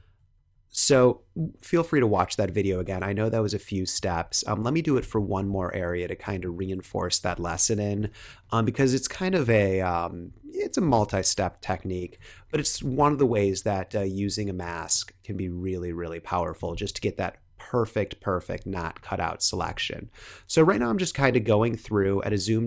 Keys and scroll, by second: 0.1 super+-, 2.6 super+-, 4.0 super+d, 7.2 super+=, 8.2 space, 13.1 [, 14.2 super+z, 14.6 x, 17.0 super+-, 18.7 space, 19.7 super+=, 21.4 super+-, 21.9 space.